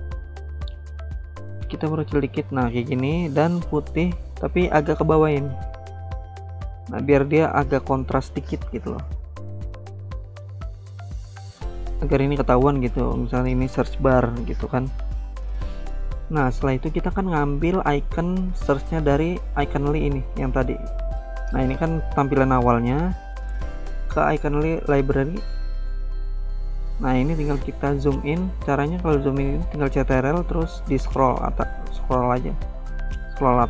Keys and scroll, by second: 0.1-0.8 typing.